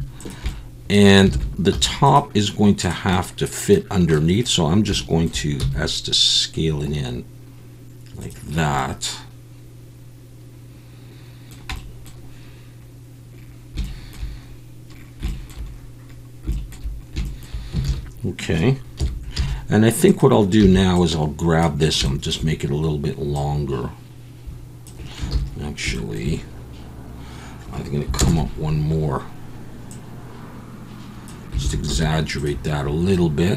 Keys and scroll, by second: 1.3 alt+a, 1.7 3, 5.6 s, 17.9 alt+a, 19.0 KP_1, 19.4 z, 20.6 b, 25.3 ctrl+z, 28.2 ctrl+KP_Add, 31.6 alt+a, 31.9 z.